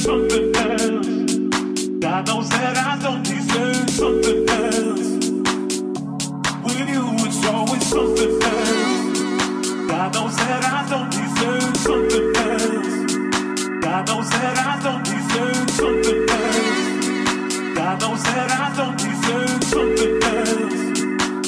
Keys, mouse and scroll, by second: 0.3 ctrl+click, 0.7 click, 1.8-21.4 drag, 2.1 Tab.